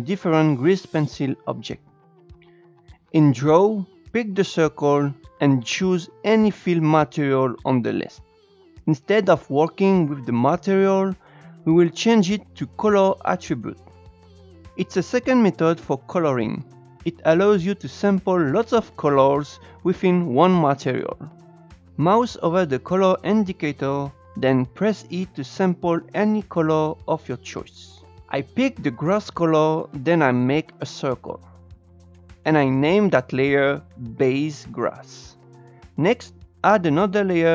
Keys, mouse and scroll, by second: 2.3 Tab, 5.4-8.1 drag, 12.3-14.3 drag, 25.8 e, 31.6 click, 32.3-34.9 drag, 36.2-37.5 drag.